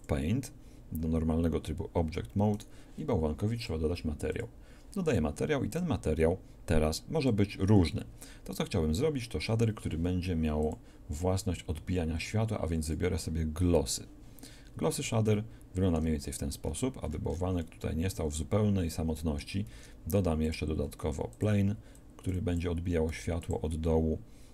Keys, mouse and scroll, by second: 0.0-1.0 drag, 2.6-6.7 drag, 19.7 shift+a, 21.0 s, 23.1 s.